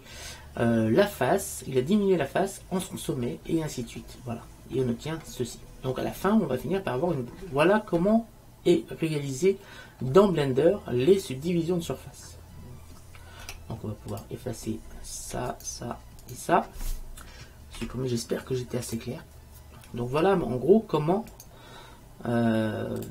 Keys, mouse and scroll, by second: 3.2 middle click, 4.9 middle click, 7.2-9.8 middle drag, 13.6 Tab, 15.7-18.2 right drag, 17.9 Delete, 21.4-23.1 right drag.